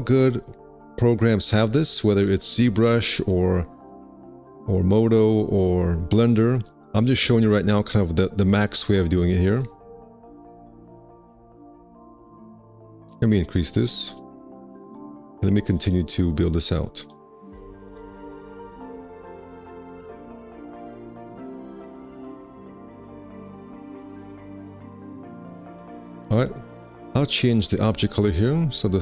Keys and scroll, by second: 9.2 x, 10.6 ctrl+z, 11.3 q, 13.8 2, 26.1 1, 26.3 q.